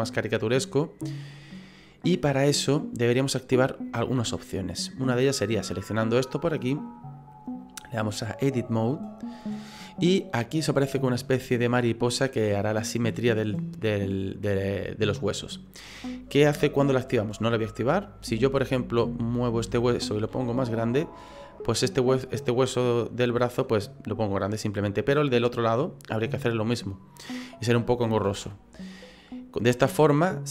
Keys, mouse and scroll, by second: 5.6 right click, 7.6 click, 17.9 click, 18.8 right click, 20.3 s, 28.2 ctrl+z, 29.5 right click.